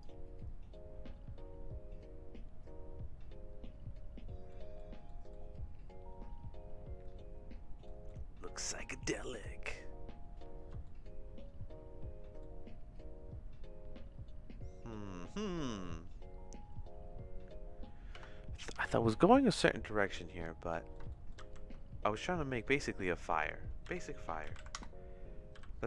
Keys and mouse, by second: 4.5 middle click, 5.1 middle click, 7.9 middle click, 9.2 click, 10.9-12.4 shift+middle drag, 18.2 space, 18.7 ctrl+s, 20.2 middle click, 20.7 middle click, 21.1 shift+middle click, 21.4 shift+a, 23.8 r, 25.5 g.